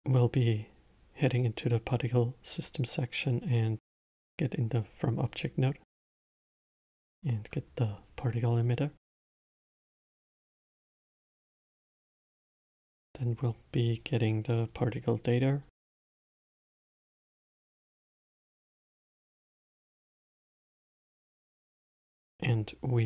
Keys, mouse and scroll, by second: 6.9-10.0 drag, 13.0 shift+a, 16.6 click, 17.2 click, 18.0 click, 19.7 click, 21.2-22.2 middle drag, 22.2 shift+a.